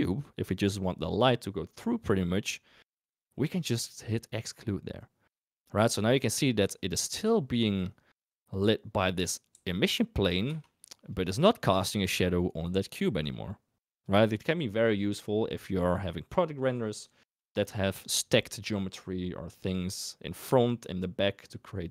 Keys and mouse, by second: 8.2 click, 9.5 g, 11.0 click.